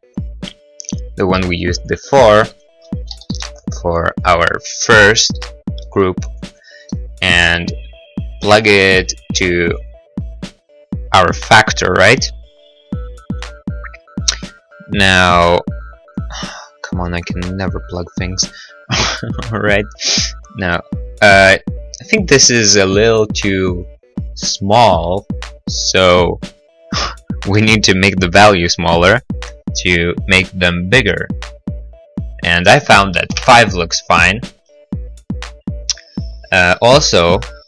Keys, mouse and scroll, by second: 2.2 click, 3.6 g, 3.6 y, 4.6 click, 5.4 g, 5.6 y, 6.7 click, 7.1 middle click, 7.9 middle click, 9.3 click, 16.5 click, 18.7 middle click, 19.4 middle click, 20.1-21.2 scroll, 21.4 scroll, 25.7 click, 33.5 5, 33.6 Return.